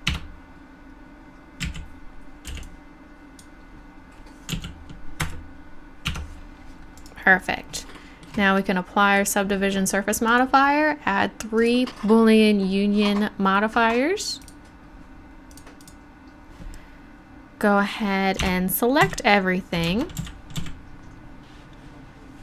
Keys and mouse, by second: 0.2 Tab, 1.7 a, 2.5 b, 4.5 x, 6.1 Tab, 7.0-8.8 right drag, 9.2-11.6 drag, 11.9-14.4 middle drag, 17.9 middle click, 18.4 Tab, 19.0 a, 19.8 Tab, 20.2 a, 20.6 a.